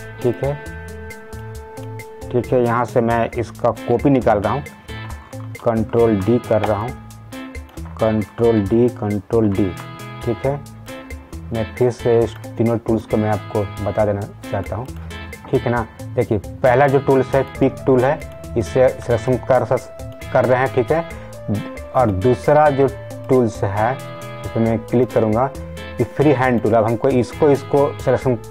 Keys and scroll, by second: 5.5 ctrl+d.